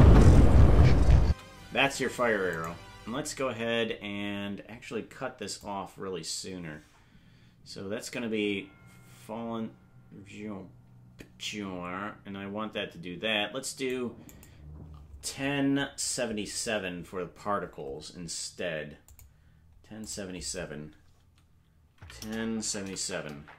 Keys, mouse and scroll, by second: 1.3 space, 2.7 right click, 5.6-14.5 drag, 19.1 click, 20.0-23.5 drag, 22.8 KP_7.